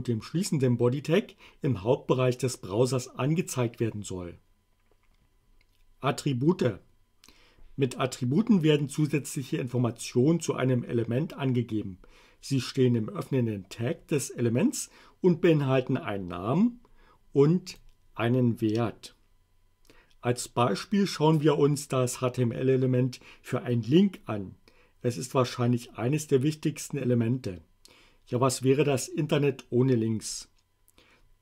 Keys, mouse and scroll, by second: 17.8 click.